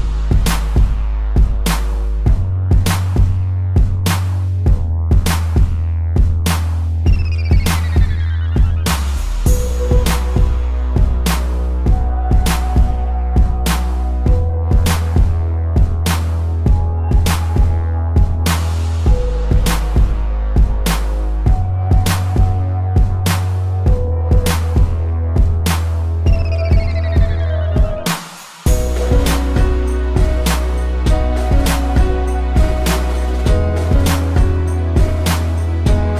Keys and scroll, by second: 4.0 space, 5.6 space, 6.8 ctrl+-, 7.3 a, 9.3 z, 9.6 space, 10.0 p, 13.6 space, 19.5 space, 20.7 ctrl+z, 21.5 space, 22.3 space, 23.5 a, 23.8 ctrl+0, 28.2 z, 30.6 space, 32.9 p, 34.1 space.